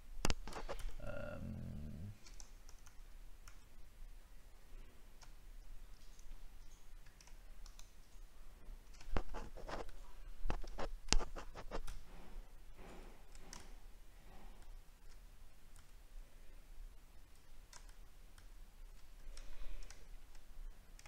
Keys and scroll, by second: 2.6 ctrl+shift+z, 15.7 ctrl+z, 17.3 ctrl+z, 19.9 alt+scroll down 1.